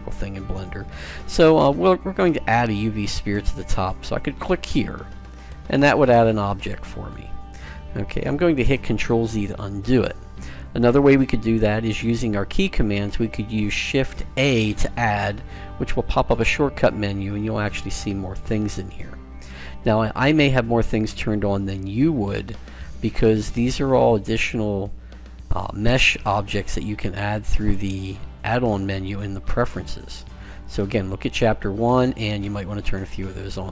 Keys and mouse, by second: 5.5 click, 9.8 ctrl+z, 14.2 shift+a.